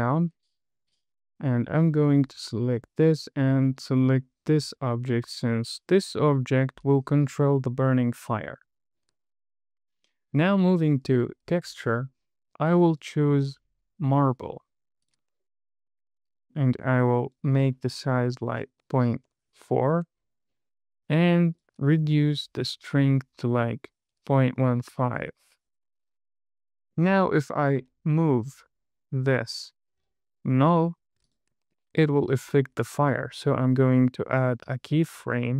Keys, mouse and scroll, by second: 0.3 click, 2.6 click, 4.0 click, 5.0 click, 11.5 click, 13.3-15.5 drag, 17.6-19.8 drag, 18.9 BackSpace, 21.9 click, 23.1-26.0 drag, 26.9 click, 28.0 g, 31.6 click, 34.7-35.5 drag.